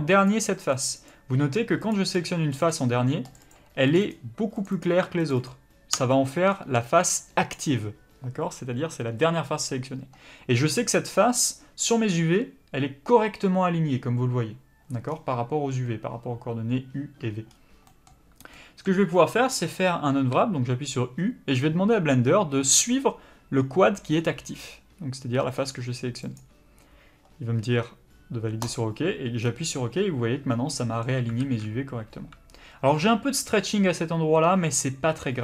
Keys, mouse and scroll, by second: 6.3 middle click, 19.1 scroll down 1, 19.2 scroll up 1, 31.4 alt+a.